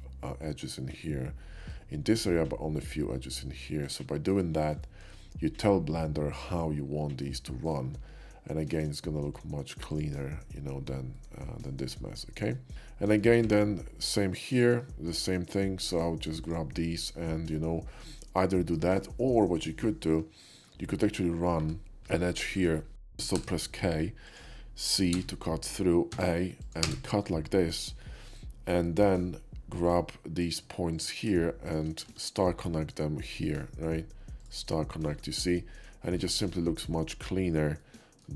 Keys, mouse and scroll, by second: 4.1 shift+middle drag, 4.8 shift+middle click, 5.2-5.5 shift+middle drag, 7.4 shift+middle click, 10.0 alt+x, 10.0 click, 11.2 right drag, 11.5-12.7 middle drag, 13.5 Tab, 14.6 click, 15.5 ctrl+click, 16.5-18.5 shift+drag, 18.8 shift+middle click, 20.6 ctrl+middle click, 22.0 KP_5, 22.5 middle click, 23.4 k, 24.3 click, 25.2 c, 26.2 a, 26.7 click, 26.9 space, 28.9 middle click, 29.9 click, 31.6 shift+click, 32.1 q, 34.4 click, 35.5 middle click, 36.8 click, 37.6 scroll down 1, 37.9 middle click.